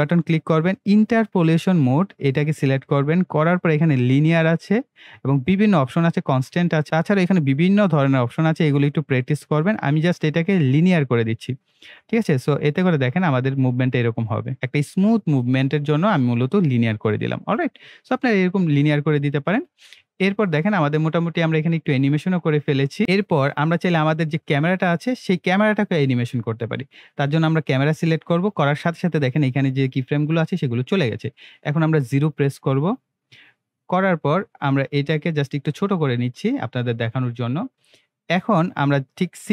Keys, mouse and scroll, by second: 10.7-13.3 drag, 13.3 space, 18.0 space, 19.9-23.2 drag, 23.2-23.7 scroll up 1, 23.7 scroll down 1, 28.0 click, 34.6 click, 34.8-36.4 scroll down 1.